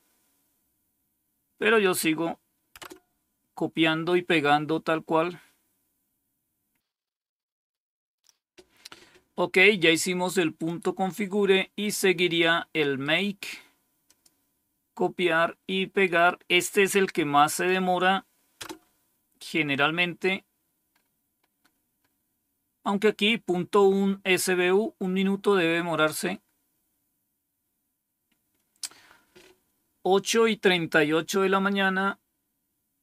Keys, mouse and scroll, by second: 1.7 click, 2.7 Return, 6.8-7.7 scroll down 2, 7.7-10.6 scroll down 1, 10.6-11.9 drag, 12.7 right click, 14.0 click, 15.9 right click, 17.4 click, 18.5 Return, 25.4-28.4 scroll down 1.